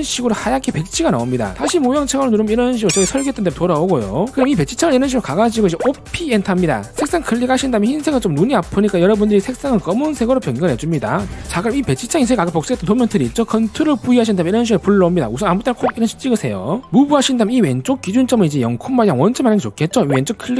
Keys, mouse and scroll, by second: 2.8 click, 8.0 click, 9.0 click, 10.5 click, 14.5 ctrl+v, 16.5 click, 17.1 5, 17.4 right click, 17.8 click, 18.5 click, 19.3 right click.